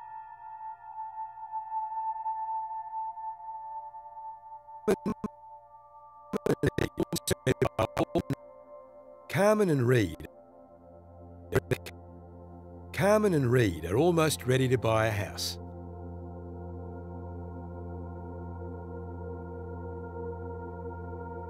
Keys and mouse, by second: 1.2 click, 1.7 click, 2.5 shift+click, 2.8 shift+click, 3.5 shift+drag, 4.8-8.3 drag, 8.4-8.8 drag, 8.6 space, 10.0 space, 10.5 click, 11.5-12.3 drag, 13.1 space, 15.5 space, 17.6 click, 21.0 click.